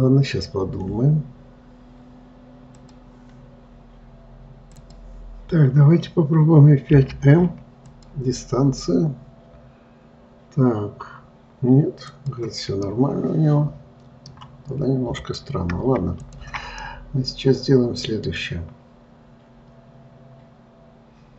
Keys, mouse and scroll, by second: 12.4 click, 13.2-15.5 middle drag, 15.5 click, 16.6 shift+click, 17.1-20.2 middle drag.